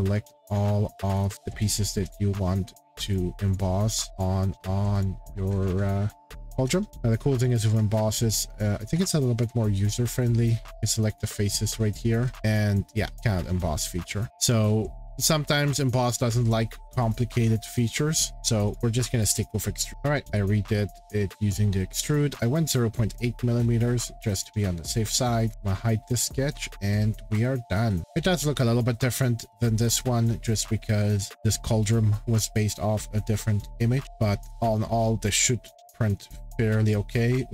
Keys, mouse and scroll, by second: 0.4 click, 1.3 click, 1.3 scroll, 2.1 click, 2.4 scroll, 3.1 click, 3.5 click, 3.9 click, 4.2 click, 5.0 click, 5.2 middle click, 5.3-6.9 scroll, 6.9 click, 7.4 click, 7.6-8.4 scroll, 9.1 scroll, 10.2 click, 10.5 scroll, 11.1 click, 12.2 scroll, 14.6-15.6 scroll, 17.1 click, 18.3 click, 18.7 click, 19.5 click, 19.9 click, 19.9 scroll, 22.2 middle click, 22.3-22.9 scroll, 23.5-23.9 scroll, 23.9 scroll down 11, 24.1-24.5 scroll up 3, 25.5 click, 25.9 scroll down 2, 26.0 middle click, 27.3 shift+middle click, 27.9 middle click, 28.0 scroll, 28.4 click, 30.1-31.3 scroll, 33.3-34.1 scroll, 34.0 click, 37.2 click, 37.2 shift+middle click.